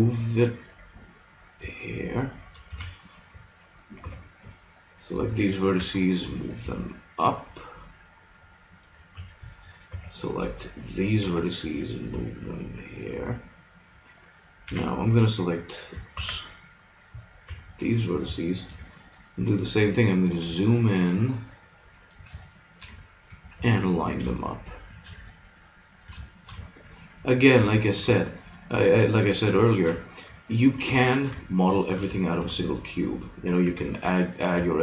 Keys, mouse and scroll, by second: 2.7 a, 4.1 b, 5.8 g, 8.9-10.6 drag, 9.0 a, 9.9 b, 11.2 g, 13.7 middle click, 14.7 a, 16.1 shift+s, 16.8 click, 17.5 b, 18.6 middle click, 23.5 g, 24.9 click, 25.2-28.6 middle drag, 33.7 g.